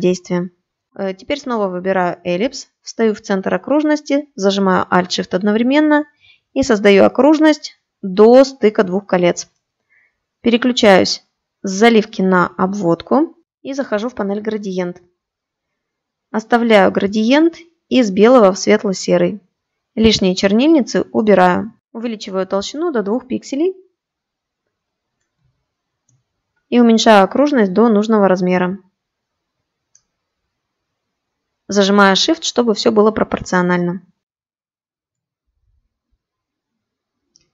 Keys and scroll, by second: 10.4 shift+x.